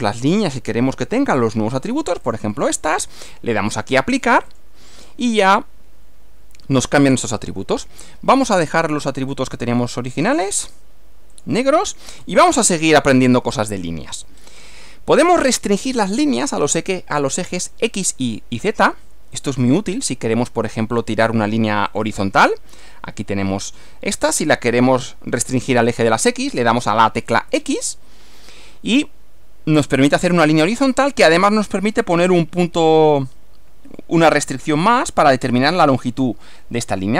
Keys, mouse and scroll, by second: 0.2 click, 2.4 ctrl+click, 4.6 click, 5.4 click, 9.0 click, 10.3 click, 11.4 click, 12.2 scroll down 1, 14.4 scroll up 2, 14.8 click, 19.4 click, 22.0 click, 27.5 x.